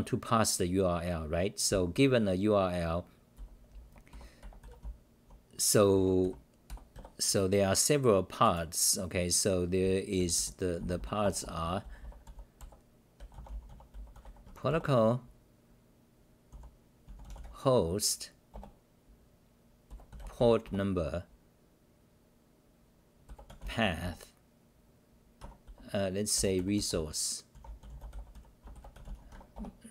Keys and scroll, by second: 1.7 d, 1.8 d, 3.1-7.4 typing, 9.9-12.8 typing, 14.5 Home, 14.7 Return, 16.5 u, 18.5 Return, 20.6 Return, 24.0 Return, 25.4 Home, 25.6-27.3 typing, 29.3 Home, 29.5 Return.